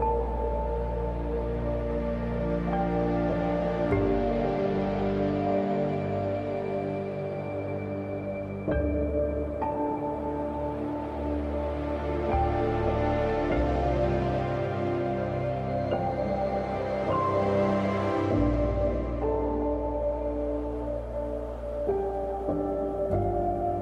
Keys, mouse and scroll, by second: 0.8 scroll up 1, 1.1-1.9 typing, 1.4-1.8 scroll up 1, 3.6 click, 4.1 scroll down 1, 4.3 scroll up 1, 4.6-7.1 drag, 7.3 click, 7.3 typing, 7.5-9.4 drag, 9.4 scroll down 1, 9.5 scroll up 1, 9.9 x, 9.9 click, 10.4 scroll down 1, 11.9-12.8 scroll up 1, 12.8-15.4 typing, 13.1 click, 13.9 click, 14.2-14.7 scroll up 1, 14.8 click, 15.6 click, 16.4 scroll down 1, 16.6 scroll up 1, 16.8 x, 17.0 click, 18.0-19.4 scroll down 1, 19.4-20.1 scroll up 1, 20.4 space, 20.5 click, 20.9 space, 22.0 click, 22.5 scroll up 1, 22.6 space, 22.8 click, 23.1 space.